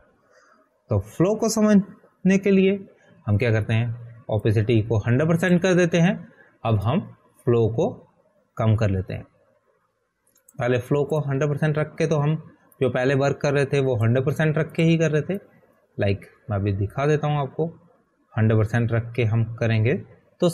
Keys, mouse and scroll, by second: 0.0 ctrl+a, 1.2 Delete, 4.7 ctrl+d, 7.0 click, 18.4 click.